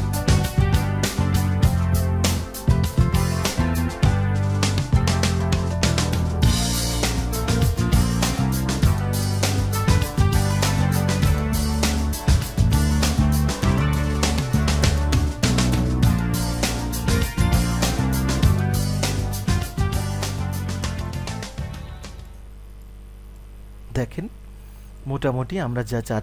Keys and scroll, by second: 7.5 ctrl+z.